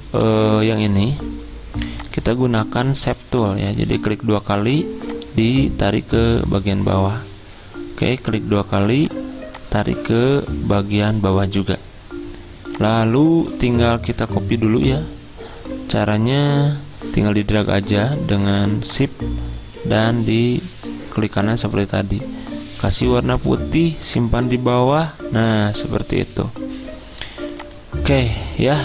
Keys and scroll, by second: 24.7 ctrl+Page_Down.